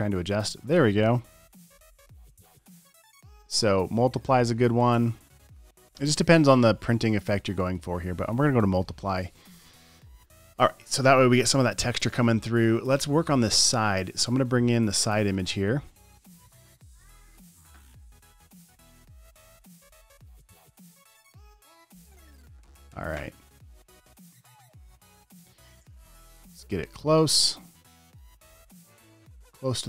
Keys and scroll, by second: 0.8 v, 2.9 space, 3.0 space, 8.8 alt+shift+m.